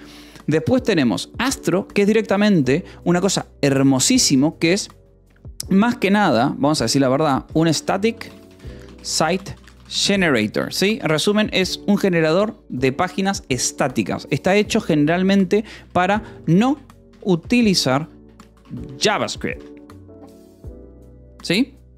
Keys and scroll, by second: 6.6 a, 7.2 BackSpace, 7.5 shift+s, 12.8 t, 13.4 e, 13.9 space, 14.7 Delete, 16.1 =, 16.2 space, 20.0-21.4 typing.